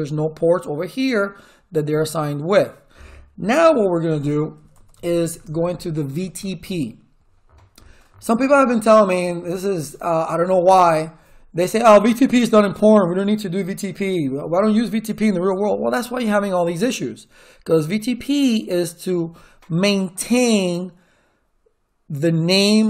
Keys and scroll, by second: 4.3-5.5 typing.